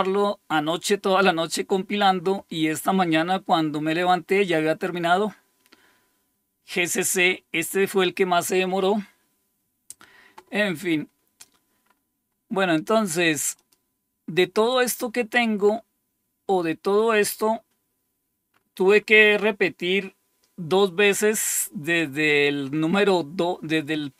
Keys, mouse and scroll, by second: 11.8-12.7 scroll up 2, 13.5 click, 14.8-15.8 scroll up 2, 15.8-18.5 scroll down 3, 18.5-22.0 scroll up 4, 22.6-23.7 scroll up 2.